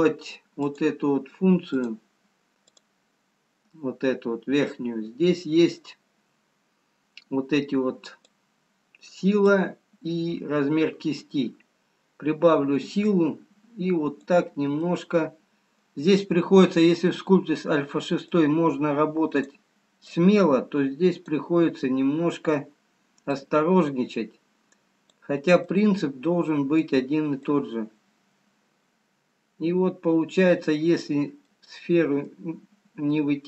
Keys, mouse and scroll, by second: 1.2 click, 8.5 click, 13.3 click, 15.0 middle click, 19.8 click, 20.5 click, 21.9 middle click, 23.8 click, 25.9 middle click, 28.5 click, 31.5 middle click.